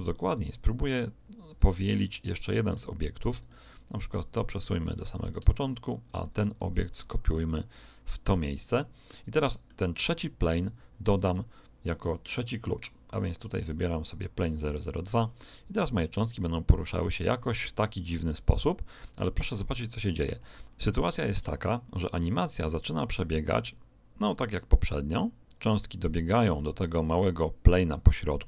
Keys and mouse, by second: 0.3 right click, 1.9-3.7 middle drag, 3.7 right click, 4.1 click, 6.0 right click, 6.5 shift+d, 8.7-10.6 middle drag, 11.2 right click, 12.7-15.4 drag, 16.4 click, 22.3 click.